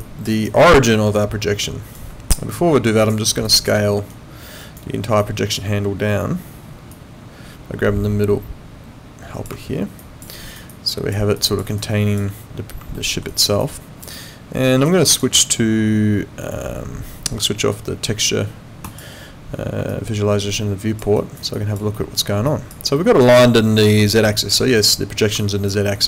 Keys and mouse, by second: 0.0 alt+click, 0.3 alt+right click, 0.6 alt+middle click, 0.9 alt+right click, 3.0 click, 3.4 alt+click, 4.1 alt+right click, 5.2 alt+click, 6.9 click, 10.0 alt+click, 10.3 alt+right click, 10.7 alt+click, 12.9 alt+middle click, 13.3 alt+right click, 13.6 alt+click, 14.9 alt+click, 18.8 click, 19.9 alt+click, 21.1 alt+right click, 21.6 alt+click, 22.0 alt+middle click, 22.5 alt+click, 23.0 alt+middle click, 24.0 alt+click.